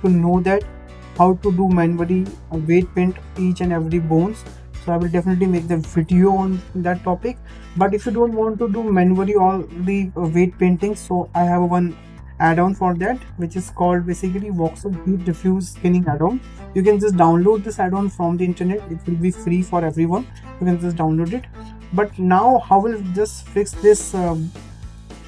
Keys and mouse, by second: 7.5-7.8 shift+middle drag, 11.2 ctrl+Tab, 13.6-17.8 drag, 21.4-21.8 shift+middle drag, 24.5 ctrl+Tab.